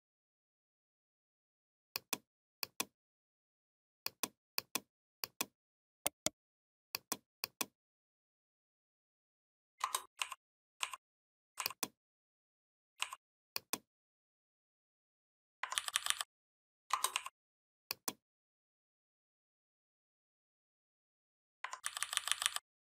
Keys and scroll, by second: 15.6 ctrl+[, 21.7 ctrl+[.